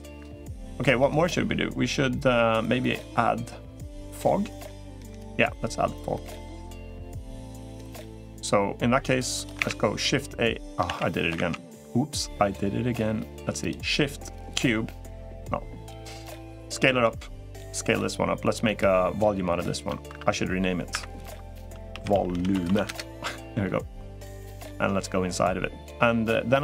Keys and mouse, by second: 0.6 middle click, 5.1-6.1 middle drag, 6.6-7.5 middle drag, 13.8 shift+a, 15.9-17.0 drag, 17.0 s, 20.4 F3, 23.2 F2.